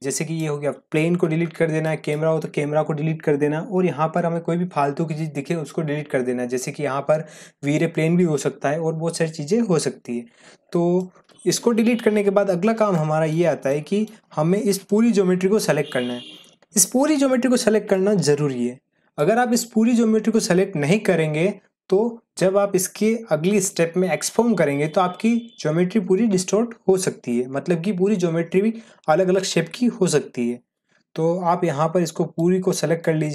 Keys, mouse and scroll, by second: 0.0-0.5 drag, 1.2 Delete, 1.8 click, 2.2 Delete, 10.7 scroll down 1, 10.9-11.9 middle drag, 13.5 scroll down 1, 13.7-14.3 middle click, 14.3 scroll up 1, 14.8 middle click, 14.9-15.7 middle click, 15.7 scroll up 1, 17.9-19.1 drag, 32.3-33.3 drag.